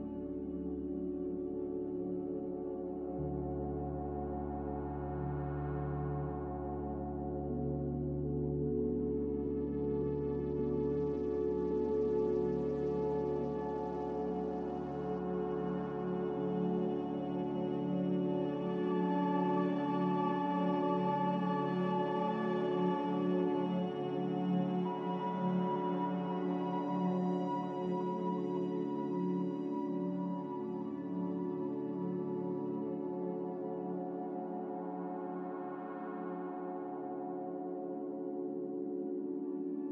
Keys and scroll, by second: 0.3 s, 2.3-3.9 typing, 4.7 Tab, 5.4-8.0 typing, 8.3 Return, 31.2 typing, 38.8 ctrl+c, 39.0 ctrl+v.